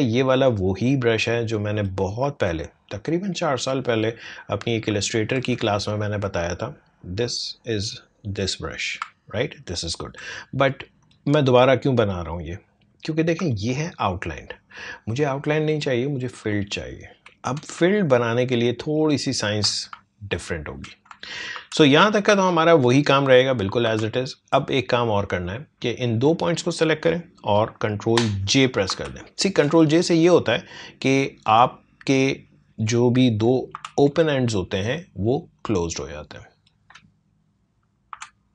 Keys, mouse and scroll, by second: 5.0 alt+scroll down 1, 5.5 space, 5.7 click, 9.2 alt+scroll up 1, 9.7 alt+scroll down 1, 11.0 click, 13.5 alt+scroll up 1, 17.0 ctrl+z, 17.8 space, 18.0 click, 18.3 space, 19.3 click, 19.5 space, 20.0 alt+scroll down 1, 20.5 scroll up 2, 21.5 ctrl+z, 22.4-23.1 alt+scroll up 1, 23.8 a, 24.5-28.8 drag, 28.8 ctrl+j, 31.2-33.7 drag, 33.7 ctrl+j, 35.6-38.1 drag, 38.1 ctrl+j.